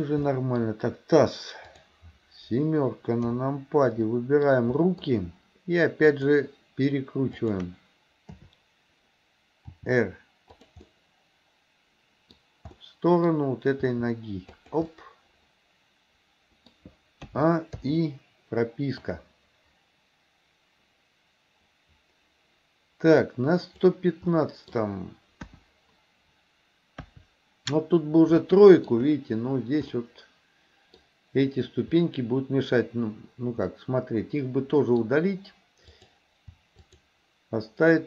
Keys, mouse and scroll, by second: 0.3 scroll up 2, 0.6 middle click, 1.7 click, 3.3 KP_7, 4.0-4.6 middle drag, 4.8 middle click, 6.2 shift+click, 7.5 shift+click, 8.3 KP_7, 9.8 r, 10.9-12.4 middle drag, 12.8 middle click, 13.9 r, 15.0-16.8 middle drag, 17.3 a, 17.8 i, 19.1-24.1 drag, 24.4 middle click, 25.5 KP_1, 27.1 KP_3, 28.6 middle click, 30.0-31.1 middle drag, 33.8-35.1 middle drag, 35.9 click, 36.8 shift+click.